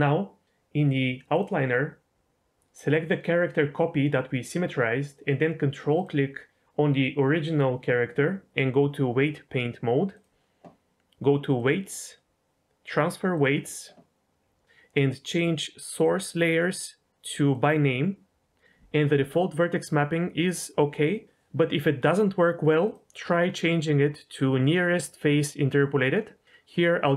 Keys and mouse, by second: 1.3 click, 5.9 ctrl+click, 9.2-10.2 drag, 11.5-13.4 drag, 16.4-17.6 drag, 21.0 click, 22.8-26.4 drag.